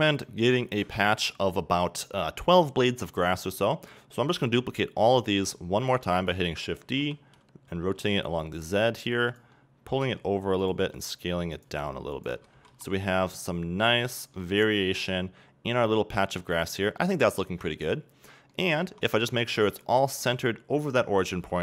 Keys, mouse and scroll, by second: 5.1 shift+a, 5.8 shift+d, 9.3 click, 9.5 double click, 11.6 click, 12.7 Tab, 12.9-18.8 middle drag, 19.5 scroll down 2, 19.7 middle click, 20.1-21.3 scroll up 2.